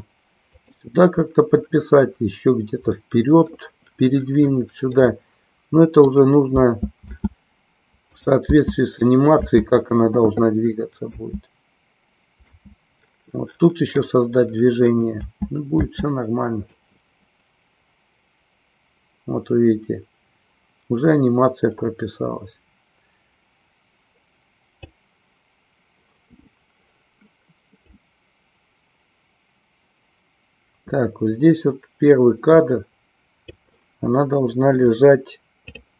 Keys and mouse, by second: 0.6 click, 2.9 middle click, 4.9-6.1 middle drag, 6.5 space, 8.1 click, 15.9 space, 16.8-25.0 drag, 28.0-33.6 drag.